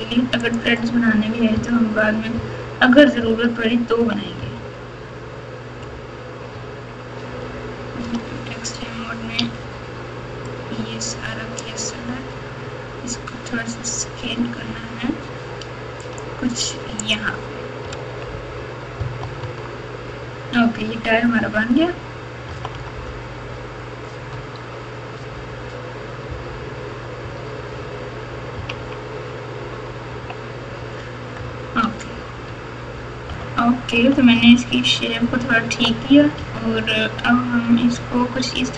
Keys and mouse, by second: 0.5 click, 1.5-4.4 typing, 6.5 Tab, 8.1 alt+z, 9.4 1, 10.5-11.6 drag, 12.6 s, 17.0 click, 17.9 alt+z, 18.9 KP_4, 19.2 KP_4, 19.4 Tab, 21.4 KP_3, 22.4 KP_4, 22.7 KP_4, 24.3 Tab, 27.2 KP_8, 27.7 KP_8, 28.5 KP_6, 28.7 KP_6, 30.1 KP_2, 31.3 KP_Add, 32.4 Tab, 33.3 KP_Multiply, 33.9-36.3 typing, 37.6 KP_3.